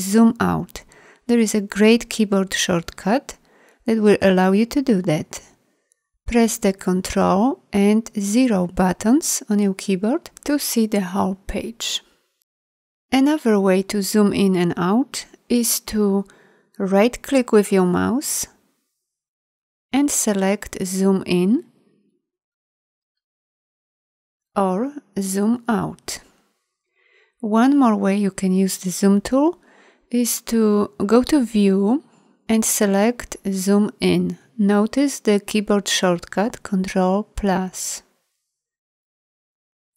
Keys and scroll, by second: 6.9 ctrl+0.